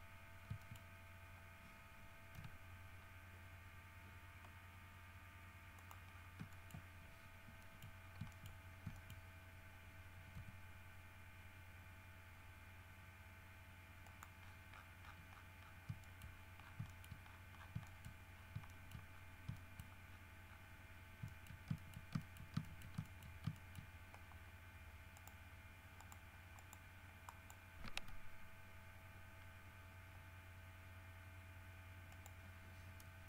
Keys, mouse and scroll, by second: 0.8 shift+middle click, 2.5 g, 5.9 middle click, 6.4 scroll up 1, 6.7 ctrl+middle click, 6.9 ctrl+scroll up 2, 7.8 shift+middle click, 8.2-8.9 shift+scroll up 4, 8.5 shift+middle click, 8.9 shift+middle click, 9.1 shift+middle click, 10.5 g, 14.2 middle click, 14.6-16.0 scroll down 8, 16.2 shift+middle click, 16.5-17.9 shift+scroll up 5, 17.1 shift+middle click, 18.0 shift+middle click, 18.5 shift+scroll up 1, 18.9 shift+middle click, 19.3 shift+scroll down 1, 19.7 shift+middle click, 20.3-20.9 shift+scroll down 2, 21.4 shift+middle click, 21.9 shift+middle click, 22.4 shift+middle click, 22.9 shift+middle click, 23.4 shift+middle click, 23.7 shift+middle click, 25.3 click, 26.1 click, 26.7 click, 27.4 middle click, 32.3 middle click.